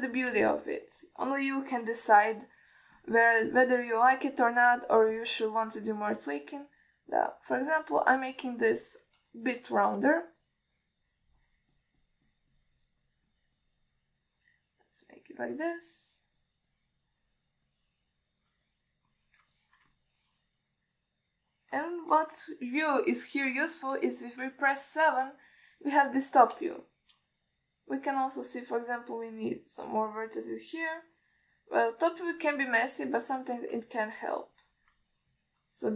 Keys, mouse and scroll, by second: 2.2-2.6 middle drag, 3.1 KP_3, 4.3-5.9 shift+drag, 6.4 ctrl+alt+middle click, 6.9 click, 7.9 click, 8.4 click, 8.8 click, 9.1 click, 9.4 click, 9.8 click, 10.5 KP_1, 11.3 click, 11.7 click, 12.3 click, 12.7 click, 13.0 click, 13.3 click, 13.5 click, 13.8 click, 14.0 click, 14.3 click, 14.6 click, 14.8 drag, 17.0-17.4 alt+middle drag, 17.7 click, 18.0 click, 18.4 click, 18.9-19.5 drag, 19.9 alt+middle drag, 20.4 middle drag, 20.8 ctrl+alt+middle drag, 21.2-23.0 middle drag, 26.8-27.6 ctrl+alt+middle drag, 28.0-28.3 alt+shift+middle drag, 29.8-32.1 drag, 32.8-33.2 alt+middle drag, 33.5 ctrl+alt+middle drag, 33.8 alt+middle drag, 34.5-34.8 drag, 35.1-35.4 middle drag, 35.8 drag.